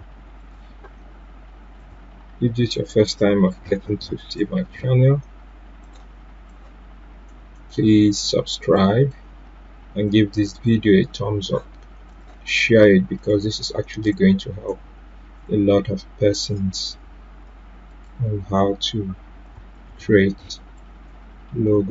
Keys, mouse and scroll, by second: 12.4 right click, 14.1-19.4 drag, 20.4-21.9 drag.